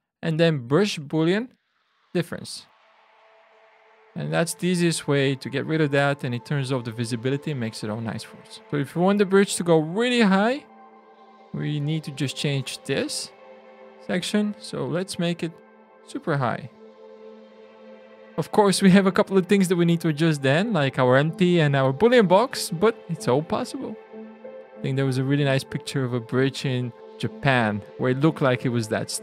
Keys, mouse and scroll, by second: 2.0 click, 4.4 alt+a, 6.8 click, 9.5 click, 11.0 Tab, 12.3 click, 13.6 shift+click, 14.6 click, 23.6 ctrl+z.